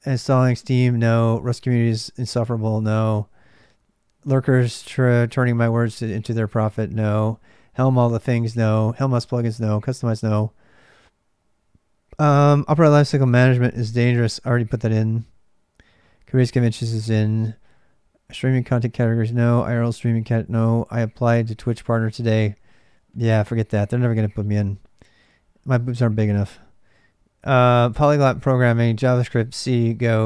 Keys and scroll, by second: 0.0-30.2 typing.